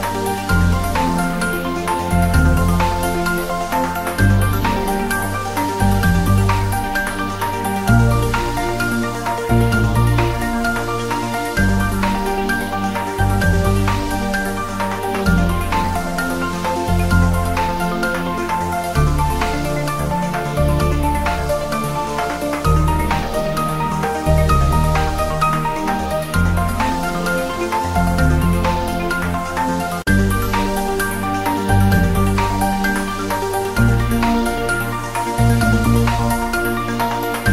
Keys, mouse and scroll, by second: 0.2 click, 3.1 scroll down 1, 4.3-5.0 scroll down 1, 5.1 click, 6.7 click, 7.5-8.1 click, 10.0 click, 10.8 click, 12.5 click, 12.8-13.2 scroll down 1, 13.9-14.8 drag, 19.5 scroll down 1, 20.1 click, 20.3 scroll down 1, 20.6 Tab, 20.7 click, 22.4-22.7 scroll down 1, 22.9 g, 23.2 click, 23.3 shift+a, 23.7 click, 25.0-26.0 scroll up 1, 26.2-27.2 drag, 27.9-28.6 drag, 30.5 scroll down 1, 30.8-33.6 typing, 31.1 click, 32.1 click, 32.7 scroll down 1, 33.3 click, 33.8 click, 35.4 shift+s, 36.0 ctrl+s, 36.4-37.0 scroll up 1, 37.3 click.